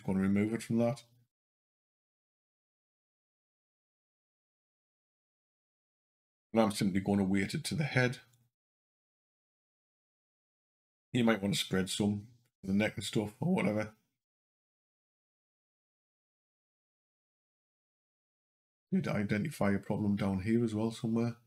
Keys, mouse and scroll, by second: 1.1 Up, 1.6 Up, 2.9 Down, 3.0 Down, 8.2 click, 14.6 click, 16.2 click, 16.8 click.